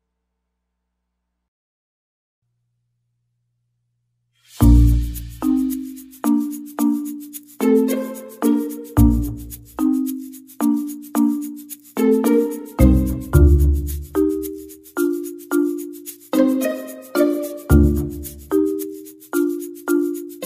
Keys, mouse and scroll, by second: 2.6 click, 3.5 click, 3.8 click, 4.1 click, 4.4 click, 4.8 click, 5.0 click, 5.3 click, 6.2 click, 6.7 click, 7.8-9.2 click, 8.3 click, 8.6 click, 9.7-10.9 scroll down 13, 10.2 middle click, 10.6 middle click, 11.1 click, 12.3 ctrl+shift+d, 13.2 middle click, 13.6 click, 14.2 shift+d, 15.1-16.1 scroll up 8, 16.1 click, 16.1-16.6 scroll up 1, 16.8-17.9 scroll up 4, 16.9 middle click, 17.6 click, 18.0 click, 20.2 click.